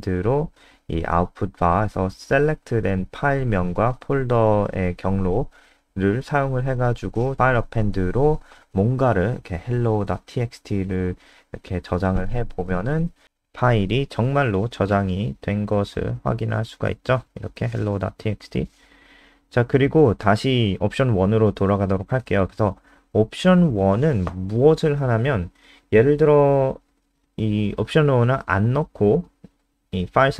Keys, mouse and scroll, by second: 0.2 ctrl+Right, 1.3 ctrl+c, 1.5 Down, 1.7 Down, 2.2 %, 3.1 ctrl+v, 3.5 %, 4.4 ctrl+s, 5.3 Up, 5.6 BackSpace, 5.7 ctrl+s, 6.0 F5, 8.7-11.5 typing, 12.7 click, 13.1 click, 13.8 click, 15.4 F3, 17.0 click, 17.9 Delete, 19.2 click, 19.7 ctrl+w, 20.0 click, 20.7 shift+Home, 21.0 shift+Up, 21.7 Down, 22.3 shift+super+Left, 23.2 shift+super+Right, 23.6 shift+Home, 25.2 typing, 27.4 ctrl+s, 28.4 Left, 28.5 Left, 28.6 Left, 29.6 ctrl+s, 29.6 typing, 30.1 F5.